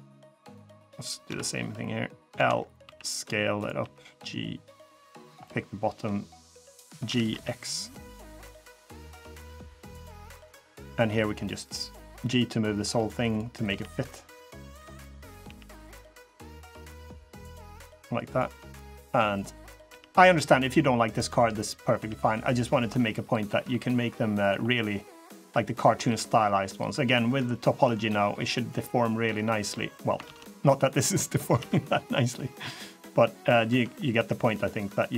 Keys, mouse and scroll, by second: 0.0 click, 1.0 KP_3, 2.1 l, 2.6 s, 3.5 g, 4.9 click, 5.2 middle click, 6.8 g, 8.6 middle click, 9.6 scroll up 1, 9.9 3, 10.1 click, 10.4 middle click, 10.8 g, 12.0 middle click, 13.1 click, 13.4 g, 15.0 click, 15.2 g, 17.4 click, 17.7 g, 18.4 middle click, 19.1 click, 19.6 g, 21.1 middle click, 21.7 g, 22.7 middle click, 23.3 g, 24.4 middle click, 25.6 click, 25.8 g, 27.3 middle click, 27.7 g, 28.6 middle click, 29.1 scroll down 1, 30.0 ctrl+z, 30.6 click, 31.3 g, 32.9 middle click, 33.4 Tab, 33.8 middle click, 34.9 middle click.